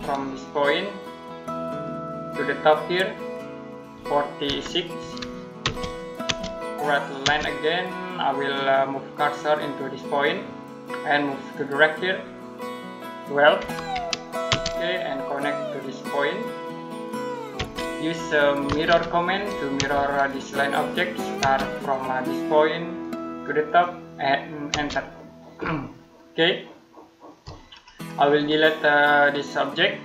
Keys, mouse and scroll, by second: 1.5 click, 4.6-5.4 typing, 13.4-14.3 typing, 17.0 click, 17.4 space, 18.5 typing, 19.6 space, 20.1 click, 21.2 space, 22.8 click, 24.5 space, 25.7 middle click, 27.5-28.2 scroll up 1, 28.2 click.